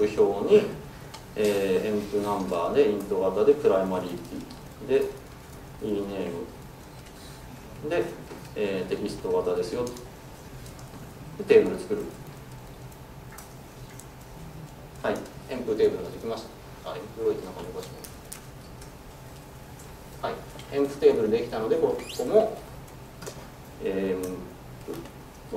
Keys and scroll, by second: 18.9 Delete, 23.3 ctrl+space.